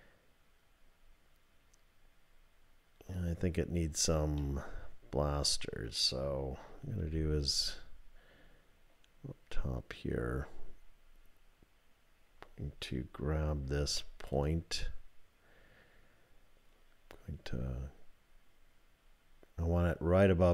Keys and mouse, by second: 4.5-5.9 middle drag, 7.0 KP_7, 13.8 1, 14.3 click.